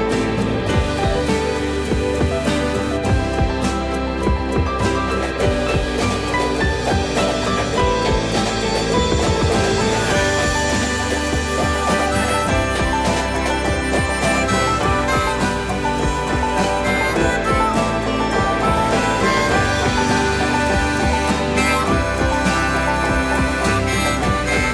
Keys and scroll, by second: 12.8 m, 23.9 4.